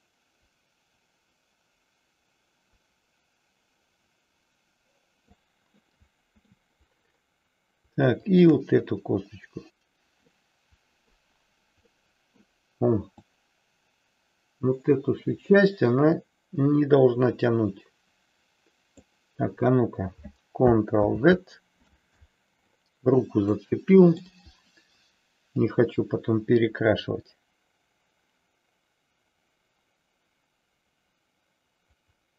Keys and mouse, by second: 5.8 middle click, 10.3 middle click, 12.1 middle click, 13.3-19.1 drag, 21.1 ctrl+z, 23.6 middle click, 25.6-32.3 drag.